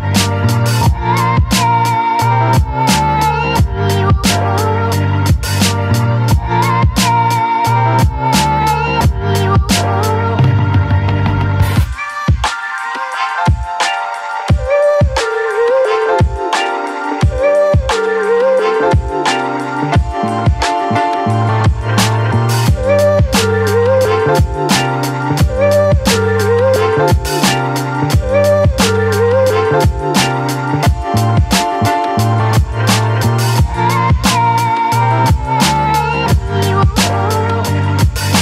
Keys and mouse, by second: 0.2 click, 1.3 click, 1.5 click, 2.1 ctrl+z, 2.2 ctrl+z, 2.5 click, 3.8 click, 4.4 ctrl+z, 4.7-6.2 drag, 6.5 click, 7.0 ctrl+z, 7.2 click, 7.7 click, 8.0 ctrl+z, 8.2 click, 8.6 ctrl+z, 8.9 click, 12.5 click, 12.9 ctrl+z, 13.2 click, 13.9 click, 14.4 ctrl+z, 14.6 click, 14.9 ctrl+z, 15.2 click, 16.0 click, 17.1 right click, 17.7 ctrl+z, 17.9 click, 19.1 ctrl+z, 19.3 click, 20.7 right click, 21.9 click, 23.8 middle click, 25.0 shift+middle click, 25.8-26.9 middle drag, 28.4 middle click, 29.1 middle click, 29.6 middle click, 30.0 shift+middle click, 31.0 shift+middle click, 33.7 middle click, 34.2 middle click, 35.2 middle click, 36.7 KP_7, 37.7 shift+middle click.